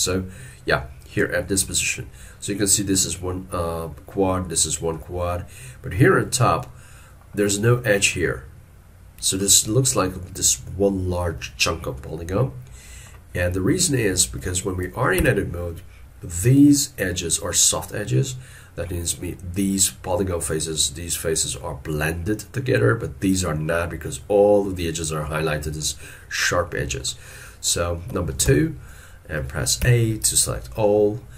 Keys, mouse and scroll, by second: 15.2 Tab, 27.1 middle click, 28.5 2.